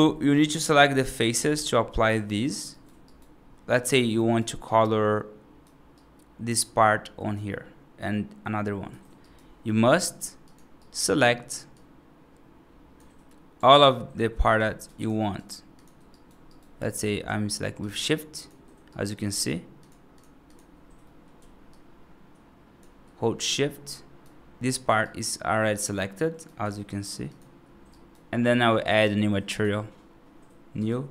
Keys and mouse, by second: 0.6 right drag, 1.2 F3, 2.0 right click, 2.6 right click, 2.9 right click, 3.6 right click, 4.5 right click, 5.8 right click, 9.1 right click, 9.7 3, 10.7 right click, 11.6-12.8 drag, 13.7 shift+click, 16.0 right click, 16.3 right click, 16.7 right click, 17.6 shift+click, 18.3 shift+click, 18.8 right click, 19.3 shift+click, 19.7 shift+click, 20.9 middle click, 21.6-22.6 shift+drag, 23.7 right click, 24.4 middle click, 24.9-26.3 right drag, 27.2 shift+click, 27.8 right click, 29.4 click, 30.6 click.